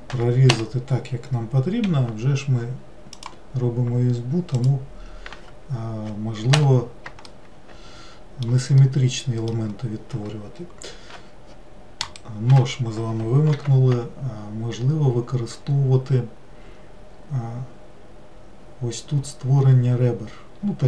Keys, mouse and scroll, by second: 1.9 k, 7.3-11.8 middle drag, 12.1-13.6 right drag, 13.6 ctrl+r.